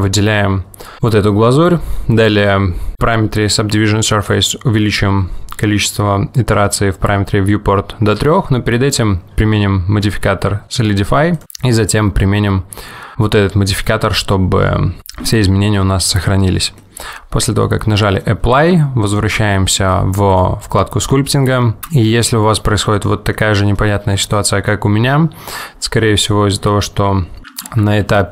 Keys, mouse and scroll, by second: 11.4 click, 16.3 click, 16.9 middle click, 25.6 middle click, 25.6 click, 25.6-26.0 scroll down 1, 26.1 middle click, 27.7 ctrl+z, 28.0 ctrl+z.